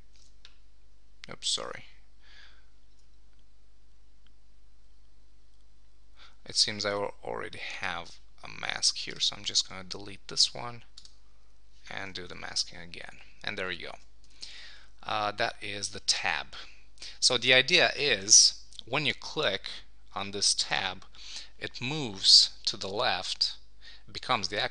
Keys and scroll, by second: 0.3 super+z, 13.9 super+1, 14.5 super+s.